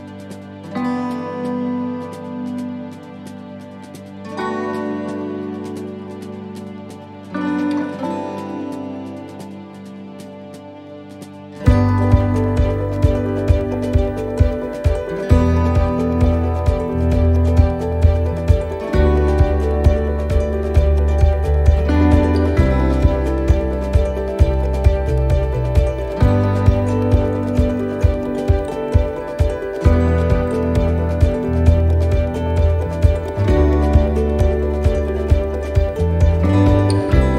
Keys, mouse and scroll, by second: 2.7 shift+middle click, 3.2 scroll up 4, 3.7 shift+middle click, 4.1-4.9 scroll down 5, 5.3 shift+middle click, 6.2 click, 8.6 shift+middle click, 8.9 scroll up 4, 9.5 shift+middle click, 10.0-10.5 scroll down 2, 10.5 middle click, 11.2 scroll up 2, 11.9 click, 13.1 middle click, 13.9 right click, 15.1 click, 16.6 shift+middle click, 17.7 middle click, 19.0 scroll down 1, 20.0 right click, 20.5 alt+shift+right click, 22.1 shift+d, 24.8 e, 31.7 middle click, 33.7 l.